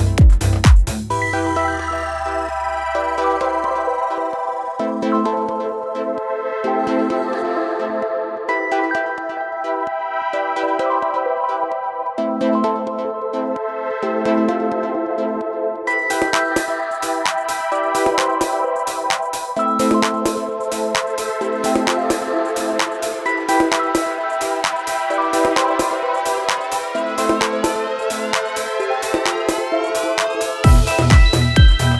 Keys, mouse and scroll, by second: 24.9 click, 28.3 click.